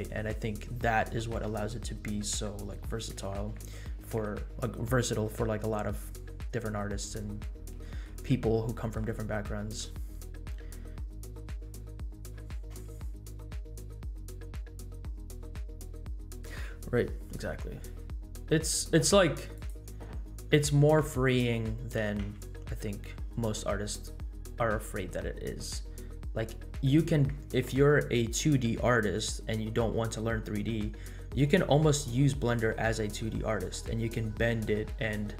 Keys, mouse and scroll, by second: 5.7-6.7 scroll up 5, 6.7-7.1 middle drag, 7.8 middle drag, 8.3 scroll up 1, 8.7 middle drag, 9.2 scroll up 1, 9.5-9.8 middle drag, 10.1 scroll up 1, 10.4-10.8 middle drag, 10.9 scroll down 2, 11.2-11.6 middle drag, 12.0 middle click, 19.5 click, 24.1 g, 24.5-25.0 scroll up 4, 25.6-26.0 scroll up 2, 26.0-26.8 scroll down 4, 26.8 click.